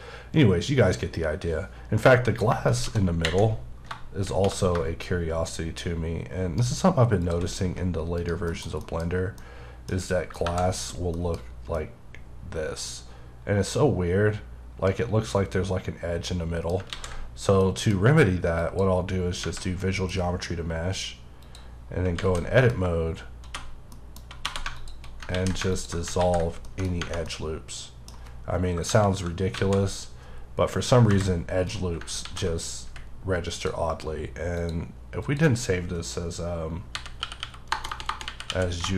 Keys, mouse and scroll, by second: 2.7 Caps_Lock, 5.0 right click, 7.6 g, 8.1 right click, 8.4 KP_Decimal, 8.8 middle click, 8.9-9.3 scroll up 3, 9.3 middle click, 10.4 KP_Divide, 11.1 middle click, 11.4-11.7 scroll up 2, 11.7 middle click, 17.6 middle click, 18.6 click, 19.4 Tab, 19.8 middle click, 21.4 click, 21.8 scroll down 2, 22.1 alt+z, 22.4 alt+middle click, 23.1-23.5 scroll up 2, 23.5 2, 23.9 middle click, 24.4 2, 24.7 alt+click, 25.3 ctrl+x, 25.7 alt+click, 26.2 ctrl+x, 26.6 middle click, 26.9 scroll down 1, 27.2 middle click, 28.8 KP_Divide, 29.5 alt+a, 30.0-31.1 scroll down 1, 31.1 KP_0, 32.2 ctrl+s, 33.5 click, 36.9 h, 37.7 BackSpace.